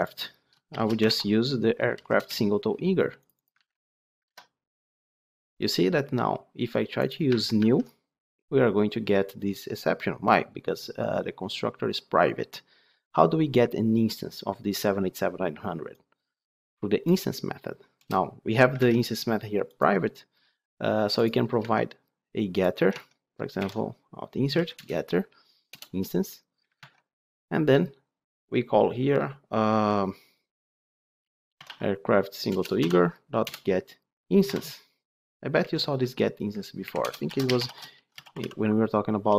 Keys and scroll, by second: 2.2 Return, 3.5 ctrl+c, 4.1 ctrl+v, 7.1 alt+1, 18.8 ctrl+Tab, 21.5 Tab, 23.5 Tab, 23.6 alt+Insert, 24.8-25.9 typing, 26.7 ctrl+Tab, 32.4 Return.